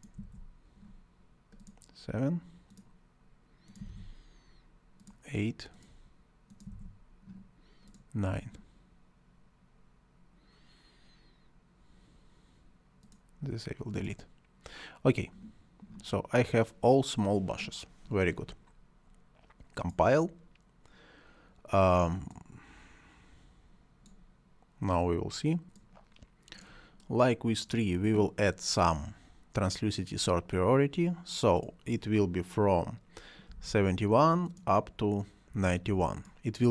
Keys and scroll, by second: 0.0-0.6 typing, 3.4-4.2 typing, 6.2-7.0 typing, 33.4 7, 35.4 9.